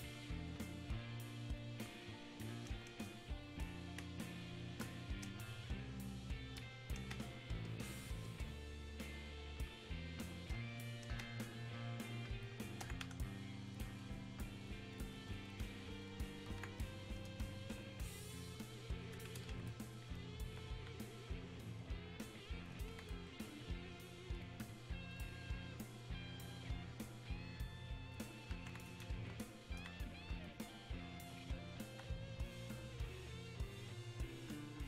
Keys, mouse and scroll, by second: 1.6-4.0 ctrl+drag, 4.0 ctrl+space, 13.7-24.4 ctrl+drag, 24.4-30.5 drag, 30.5-33.7 alt+drag, 33.7-34.8 drag.